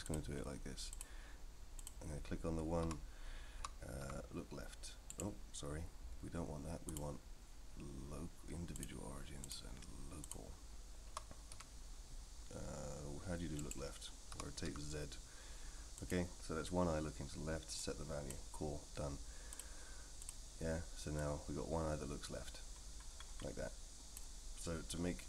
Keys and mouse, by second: 0.2-1.0 drag, 1.8 click, 2.8 l, 3.6 r, 6.9-8.9 drag, 9.4-10.6 drag, 11.1 r, 14.3 r, 17.8 click, 19.6-20.3 drag, 21.2-24.1 drag.